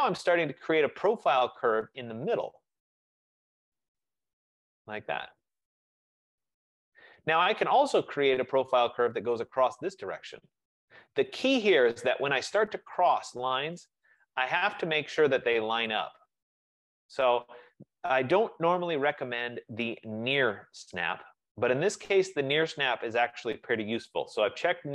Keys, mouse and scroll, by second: 0.0-0.7 typing, 3.7-5.0 drag, 7.5 right click, 9.1-11.9 right drag, 13.7 F15, 14.2 click, 16.9-19.3 drag, 22.7-24.9 drag.